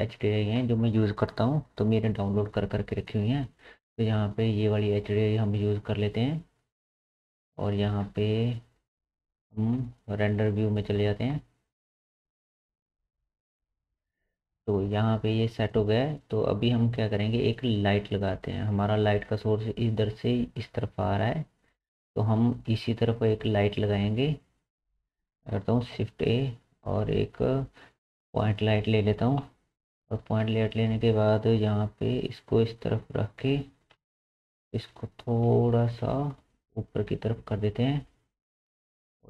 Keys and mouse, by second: 17.0-25.3 drag, 26.1 shift+a, 29.4 KP_7, 31.7 g, 33.4-34.9 middle drag, 34.0 KP_1, 34.9 g.